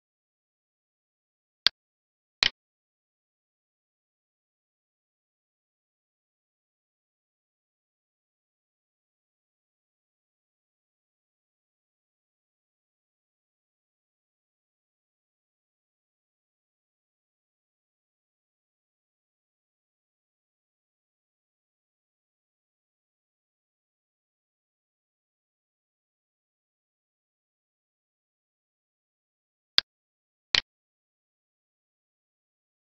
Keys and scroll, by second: 10.1 alt+e, 23.4 alt+Tab, 26.3 Up, 32.1 Up.